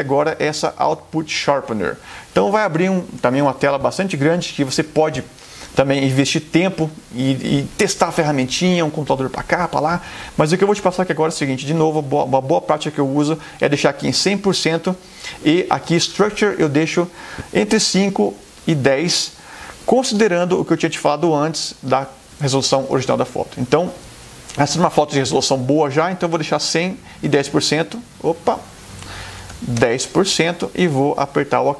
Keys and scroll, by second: 18.0-19.6 typing, 21.9 Delete, 29.2-30.1 typing.